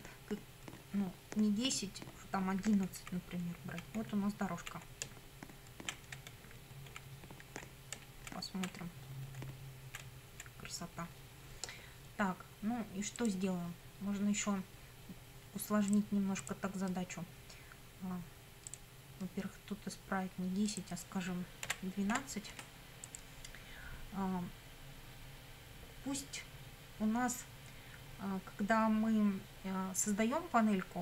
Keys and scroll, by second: 2.9 Left, 5.1 Down, 6.4 Left, 7.0 Up, 7.6 Left, 8.0 Down, 8.2 Left, 8.9 Up, 9.4 Left, 10.3 Right, 21.6 Delete, 22.1 2.